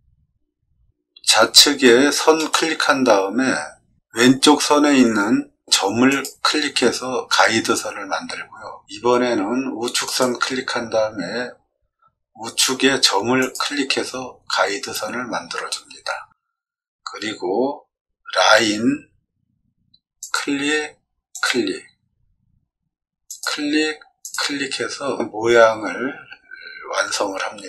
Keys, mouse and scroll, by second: 2.3 click, 6.0 click, 10.0 click, 21.3 click, 23.2 click.